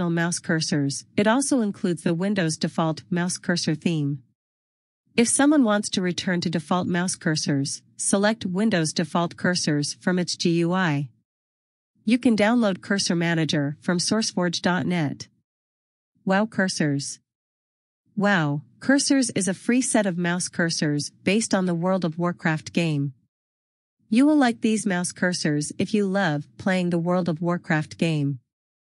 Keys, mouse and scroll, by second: 4.6 click, 8.4 click.